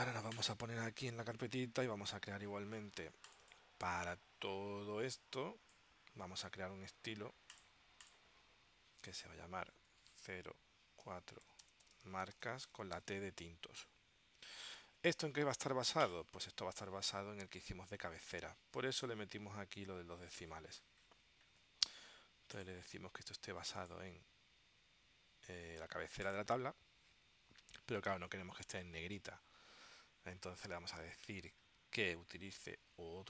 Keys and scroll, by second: 10.4-13.0 typing.